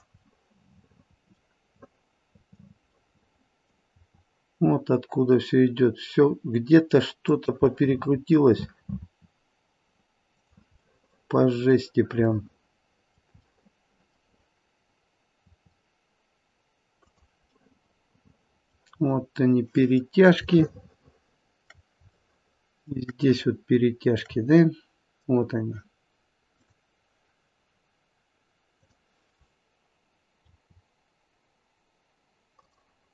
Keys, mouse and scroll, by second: 0.3 middle click, 0.9 middle click, 1.1 middle click, 1.9 middle click, 3.1 middle click, 3.8 r, 7.8 middle click, 8.9 r, 11.0 middle click, 12.3 middle click, 13.6 middle click, 14.9-16.4 scroll up 2, 15.4 r, 18.3 middle click, 18.9 middle click, 20.6 shift+middle click, 22.2 shift+middle click, 24.8 shift+middle click, 26.6 click, 28.7 click, 30.4 r.